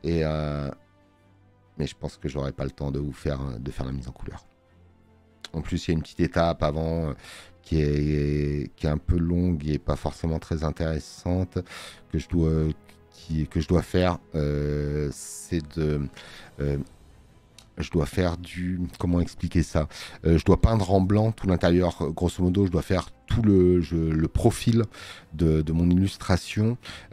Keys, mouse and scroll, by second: 6.2 space, 6.4 click, 14.8 space, 15.0 click, 21.6 space, 21.7 click.